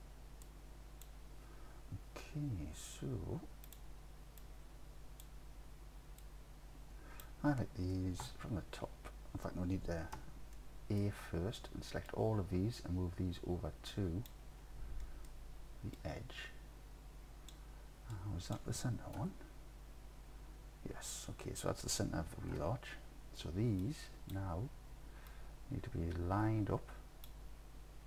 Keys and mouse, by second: 0.5 click, 3.7 click, 4.5-5.2 drag, 5.2-6.2 middle drag, 6.2-7.2 drag, 7.2 middle click, 8.3 KP_7, 10.2 a, 10.6 click, 12.1-14.3 drag, 15.1 click, 16.0-17.5 drag, 18.2 click, 19.2 KP_3, 22.6 KP_7, 23.9 click, 25.4-27.3 drag.